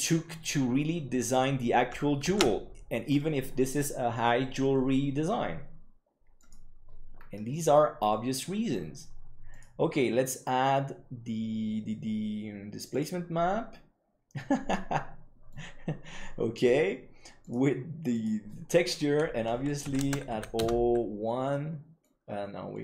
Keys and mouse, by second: 6.8 click, 7.5 middle click, 9.5-13.6 drag, 14.7 middle click, 17.4-18.8 drag, 19.7-21.1 drag, 21.4 middle click.